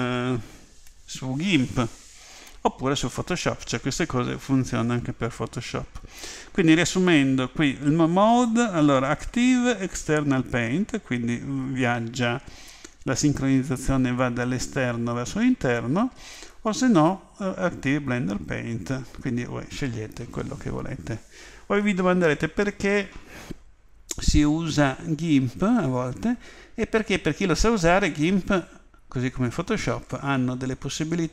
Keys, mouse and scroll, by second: 8.3 click, 16.4 click.